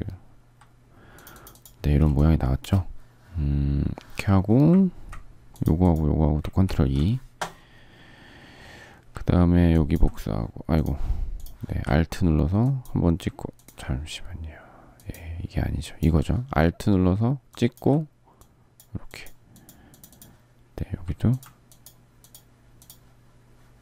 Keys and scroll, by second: 1.8 space, 2.3 space, 6.4 ctrl+e.